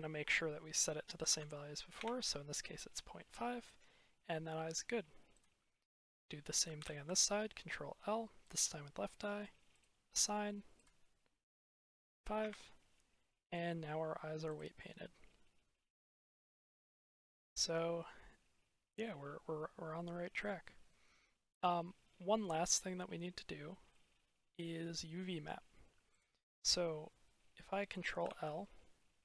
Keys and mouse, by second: 3.1-4.2 drag, 4.4 click, 9.6 click, 10.7-12.4 drag, 13.2 middle click, 13.3 drag, 13.5 middle drag, 14.0-15.8 middle drag, 16.2 shift+middle click, 17.1 shift+middle click, 19.7-20.5 drag, 23.8 drag, 24.0 middle click, 25.1 middle drag, 25.3 click, 28.1 ctrl+l.